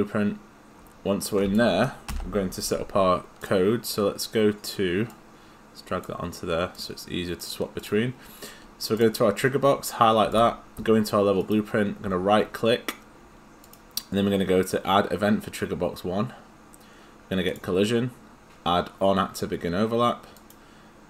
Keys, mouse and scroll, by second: 2.1 Delete, 3.4 click, 7.4 click, 9.0 click, 11.4 right click, 13.6 click.